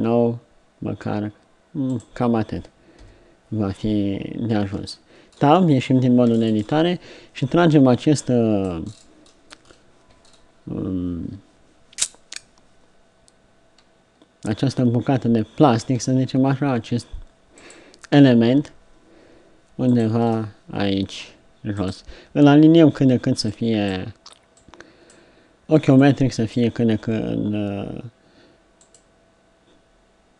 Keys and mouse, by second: 3.0 KP_3, 4.8 Tab, 8.3-11.7 right drag, 16.0 r, 18.1 g, 20.9-23.6 drag, 20.9 g, 27.0 g.